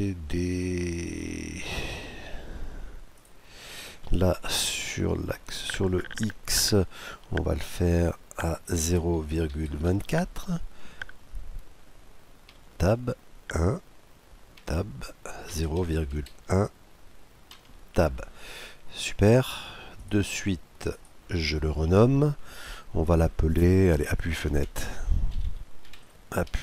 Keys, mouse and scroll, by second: 2.8-4.6 drag, 20.6-22.3 drag, 25.1 p.